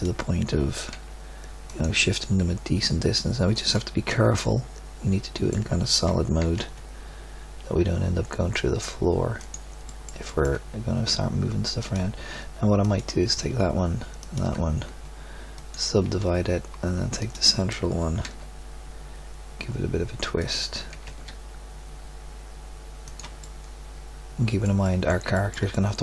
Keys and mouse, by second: 0.9 g, 4.1 z, 4.7 click, 6.4 g, 10.0 middle click, 11.8-16.6 middle drag, 17.2-18.2 middle drag, 18.2 g, 20.9 g, 23.4 click, 23.6-24.8 middle drag, 25.4 click, 25.5 middle click, 25.7 click.